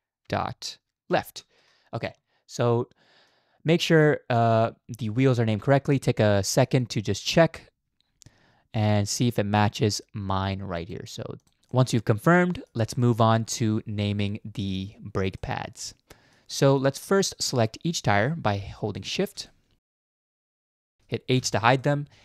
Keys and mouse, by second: 3.3-5.8 drag, 6.5 shift+middle drag, 6.8-7.3 middle drag, 9.3-10.9 drag, 11.4 click, 11.8-12.7 middle drag, 13.0 shift+middle drag, 15.4-16.4 middle drag, 16.7 shift+middle click, 17.4 click, 19.5-20.0 drag, 20.3 shift+click, 20.7 shift+click, 21.3 h, 21.8-22.2 middle drag.